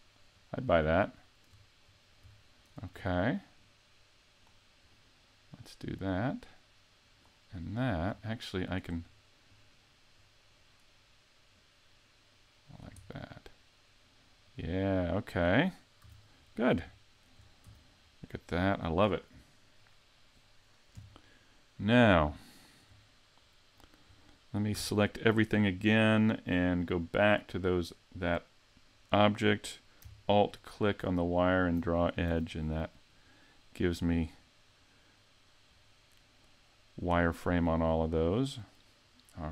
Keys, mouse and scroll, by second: 1.0 shift+middle click, 1.8 scroll up 3, 2.4 shift+middle click, 3.6 click, 4.8 right click, 5.8 click, 8.5 shift+right click, 9.5 click, 11.5 click, 13.0-14.4 scroll down 3, 14.4 click, 16.0 a, 16.4 scroll down 3, 17.0 shift+middle click, 17.6 z, 17.9 click, 18.0 middle click, 20.9 KP_5, 22.5 shift+middle click, 24.1 scroll down 3, 24.7 a, 27.5 click, 30.5 alt+click, 31.3 alt+click, 32.3 a, 32.6 scroll up 4, 34.3 middle click, 37.3 scroll down 2, 37.8 middle click.